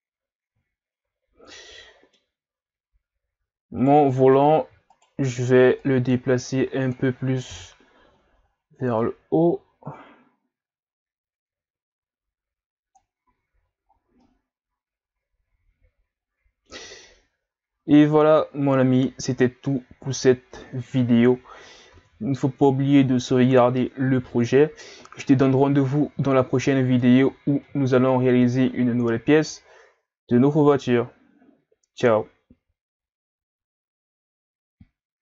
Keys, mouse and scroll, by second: 0.0-0.8 scroll down 1, 0.8-1.5 scroll up 1, 1.5-3.8 middle drag, 3.8 right click, 4.1 middle click, 4.9 shift+right click, 5.8 click, 7.5 KP_1, 9.0 click, 13.3 a, 13.9-14.2 scroll down 2, 14.2-20.0 middle drag, 21.9 ctrl+s, 27.6-30.7 middle drag.